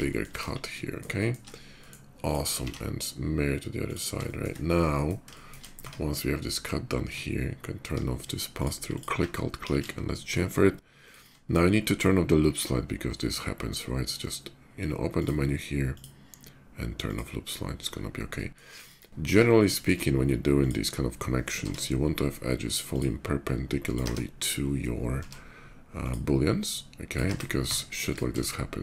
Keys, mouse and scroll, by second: 0.1 KP_5, 0.4-0.8 middle drag, 0.9 shift+middle drag, 1.5 shift+middle click, 1.9 shift+click, 2.4 alt+x, 3.6 click, 4.0 shift+middle click, 4.3-5.2 shift+middle drag, 5.6 Tab, 7.5 Tab, 7.9 middle click, 8.1 click, 8.7 alt+click, 9.7 ctrl+shift+b, 10.8 click, 14.7 click, 15.6 click, 16.7 click, 17.7 middle click, 18.5 middle click, 18.8 shift+middle click, 19.1 Tab, 19.5 shift+middle click, 20.4 click, 20.9 middle click, 21.2 k, 22.7 click, 23.5 click, 23.8 space, 24.8 k, 25.6 click, 26.6 click, 27.4 Tab, 27.5 space, 27.8 click, 28.4 shift+click.